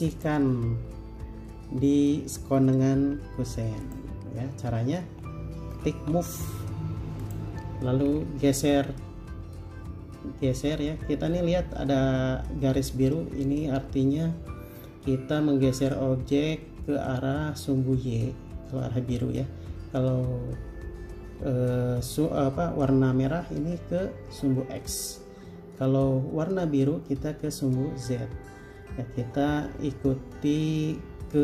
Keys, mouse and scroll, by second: 3.2 m, 5.3 Escape, 6.3 m.